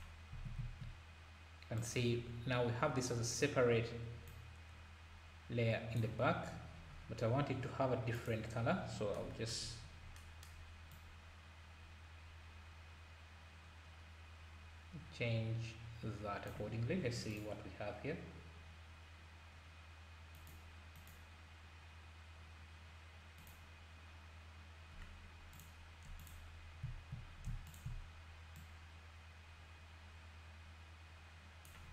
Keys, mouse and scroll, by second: 4.3 click, 6.6-7.3 scroll down 10, 8.1-8.7 drag, 9.6-10.2 scroll up 8, 10.9-14.0 drag, 25.5 click, 26.2 click, 27.7 shift+click, 28.5 click.